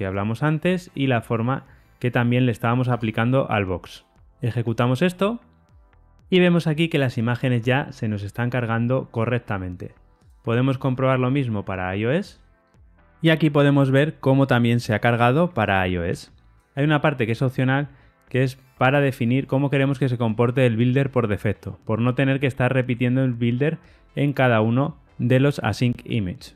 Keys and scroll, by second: 2.8 Tab, 4.7 ctrl+r, 4.7 shift+F10, 12.2 ctrl+r, 12.2 shift+F10.